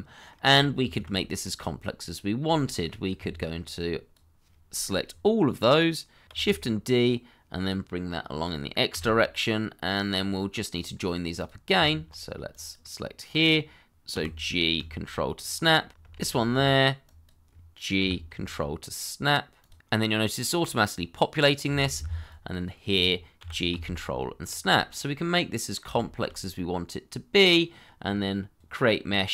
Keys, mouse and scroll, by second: 0.6 scroll down 1, 0.9 shift+middle click, 1.1 middle click, 3.1 Tab, 6.7 shift+d, 8.9 x, 10.7 scroll up 1, 11.7 Tab, 14.1 f, 15.3 ctrl+click, 16.1 alt+q, 18.0 g, 19.6 ctrl+click, 21.7 alt+q, 23.3 g, 24.4 ctrl+click, 24.9 middle click, 25.9 shift+middle click, 26.5 middle click, 27.9-28.3 scroll down 1, 28.9-29.3 scroll down 1.